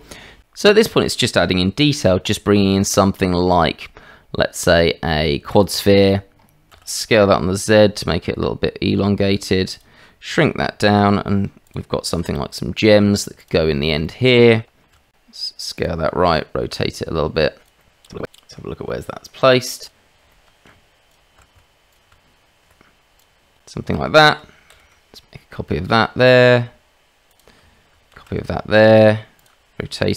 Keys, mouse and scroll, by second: 1.8 shift+a, 6.7 s, 12.2 s, 12.2 g, 14.0 shift+click, 14.9 s, 16.2 r, 18.0 click, 18.1 middle click, 18.5 click, 19.8 click, 20.7 g, 21.4 r, 22.1 g, 23.2 click, 23.9 shift+middle drag, 24.7 shift+d, 28.1 shift+d, 30.0 r.